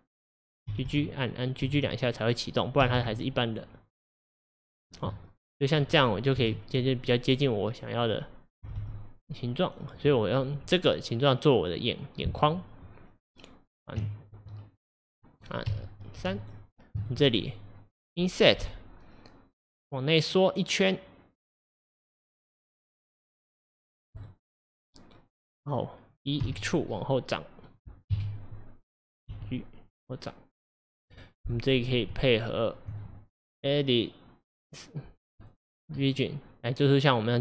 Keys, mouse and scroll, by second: 2.8 g, 5.1-6.4 middle drag, 6.4 KP_1, 8.7 g, 14.0 Tab, 15.7 2, 16.2 3, 16.4 click, 17.0 shift+click, 18.6 i, 24.9-26.4 middle drag, 26.4 e, 28.1 KP_1, 29.4 g, 31.5 click, 32.2 Tab, 33.5-36.1 drag.